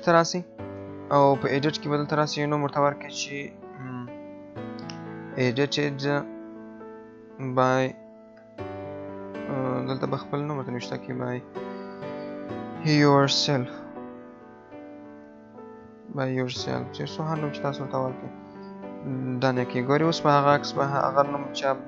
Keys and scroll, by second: 8.4 BackSpace, 9.0 BackSpace, 12.8 BackSpace.